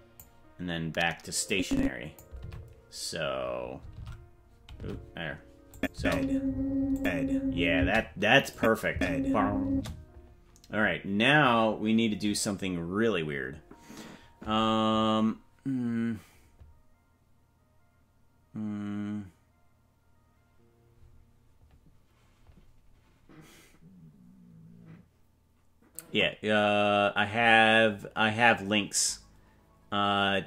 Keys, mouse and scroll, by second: 1.4 click, 2.3 alt+r, 3.9 alt+r, 4.8 alt+r, 5.7 click, 5.9 space, 6.9 click, 7.7 space, 8.5 click, 8.9 space, 9.7 space.